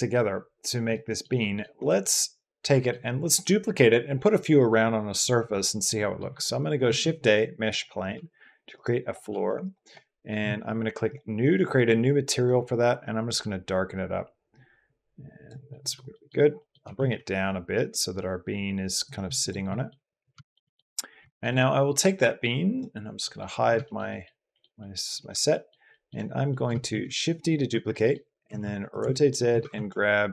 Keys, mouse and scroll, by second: 0.7-1.0 middle drag, 1.2 middle drag, 1.6 middle click, 1.8-2.7 drag, 5.7 drag, 6.6 shift+a, 7.9 s, 9.1 s, 10.9 click, 15.5 click, 15.9 click, 16.4 click, 16.6 g, 16.8 z, 19.2 click, 19.5 drag, 20.4 drag, 21.1 shift+drag, 21.3 click, 21.5 middle click, 22.5 middle click, 23.0 middle drag, 23.6 shift+drag, 23.9 middle drag, 24.3 middle drag, 24.6 middle drag, 25.3 shift+drag, 25.7 shift+drag, 26.3 click, 26.8 shift+d, 27.5 Escape, 27.8 click, 28.2 r, 28.4 z, 28.9 shift+click, 29.3 g, 29.6 shift+z.